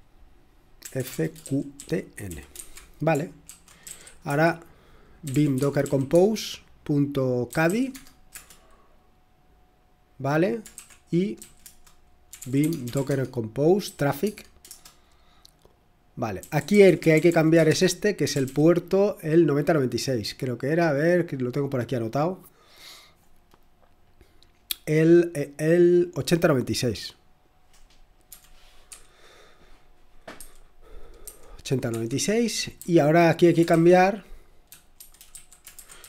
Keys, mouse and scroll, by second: 0.8-6.1 typing, 7.4-8.3 typing, 10.7-15.1 typing, 16.3-18.9 typing, 20.9-21.6 typing, 23.7-27.3 scroll down 5, 27.3-27.8 scroll down 1, 28.3-28.8 typing, 30.3-31.2 typing, 31.8 Escape, 32.7-36.0 typing.